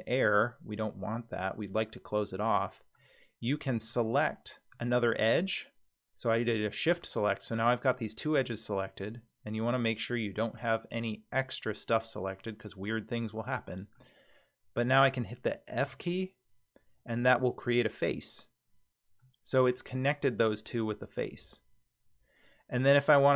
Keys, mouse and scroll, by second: 1.2 scroll down 1, 1.5-3.0 middle drag, 4.4 shift+click, 7.0 click, 8.1 shift+click, 9.0-11.1 middle drag, 12.4-14.0 middle drag, 15.8 f, 17.1-19.2 middle drag, 20.8-22.9 middle drag.